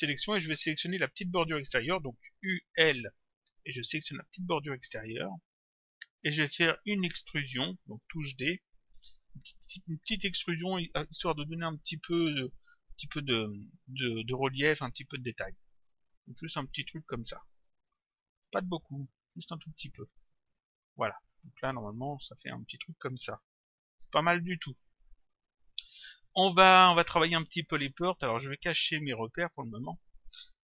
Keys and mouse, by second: 2.5 u, 4.6 click, 6.2 click, 7.6 click, 9.0 d, 15.4 click, 19.5 click, 21.6 click, 26.2 click, 29.2 click.